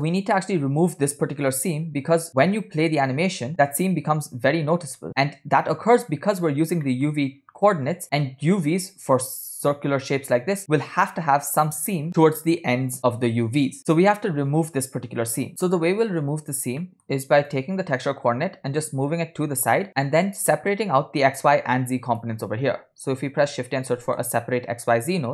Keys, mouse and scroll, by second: 2.6-6.5 drag, 6.8 middle click, 7.6 click, 16.9 middle click, 17.2 scroll up 2, 17.5 drag, 18.8 g, 19.9 middle click, 21.5 shift+a.